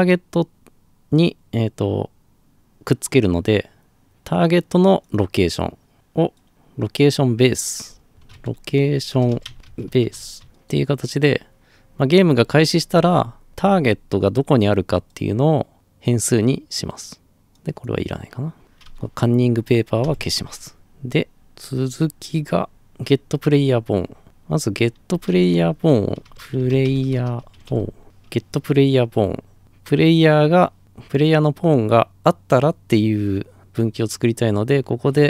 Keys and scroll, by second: 7.8-10.6 typing, 20.0 Delete, 24.9-28.5 typing.